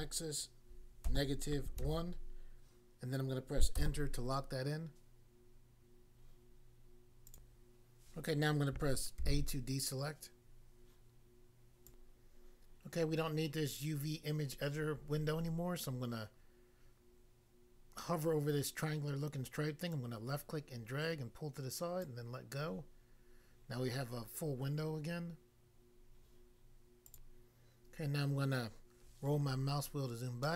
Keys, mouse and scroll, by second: 7.3 click, 7.5 click, 9.2 a, 11.8 click, 12.0 click, 19.9 click, 22.0 click, 27.1 click, 29.0 scroll down 1, 30.4 middle click.